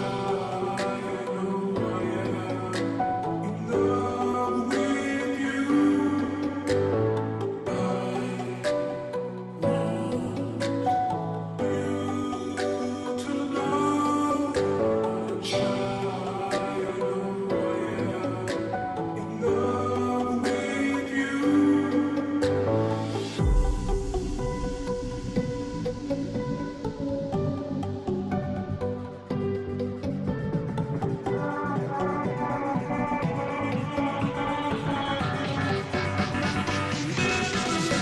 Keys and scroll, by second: 0.7 ], 0.9 ], 8.7 ], 9.9 ], 10.1 ], 13.9 ], 14.1 ], 23.5 space, 23.8 space, 31.5-32.3 space, 33.2 ctrl+shift+i, 34.0 Delete, 36.8 ctrl+d.